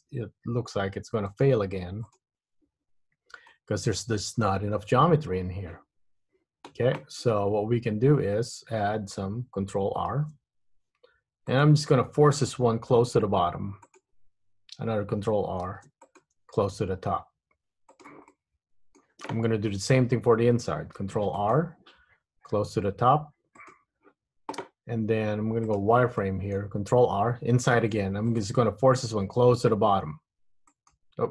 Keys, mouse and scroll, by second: 0.2 Tab, 1.1 Tab, 1.4 right click, 3.2 Tab, 3.6 middle click, 4.7-5.5 scroll up 3, 5.5-6.0 scroll down 3, 10.3 ctrl+r, 15.7 ctrl+r, 18.5 middle click, 21.1 ctrl+r, 25.8 click, 26.3 middle click, 27.9 ctrl+r.